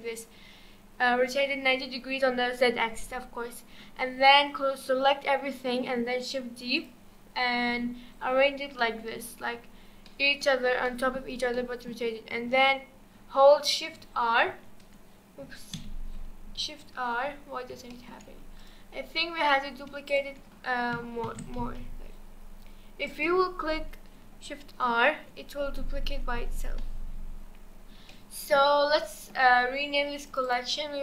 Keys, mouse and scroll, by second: 6.8 click, 7.9-8.8 scroll up 4, 8.8-9.3 middle drag, 9.3-10.1 scroll down 3, 10.1-10.5 middle drag, 10.5-10.9 scroll down 2, 10.9-13.9 middle drag, 13.9 shift+r, 14.5 shift+r, 15.7 a, 16.6 shift+r, 17.4-17.9 scroll up 2, 17.9 shift+middle drag, 18.2-18.6 scroll up 3, 18.6 click, 19.4 click, 20.1 shift+click, 21.3 shift+d, 23.5-24.7 scroll down 4, 24.7 shift+r, 25.2-26.1 scroll down 5, 26.1 shift+r, 26.3 shift+r, 26.6 shift+r, 27.6-28.0 scroll up 1, 28.1-30.3 shift+middle drag, 30.3 click, 30.4-31.0 drag.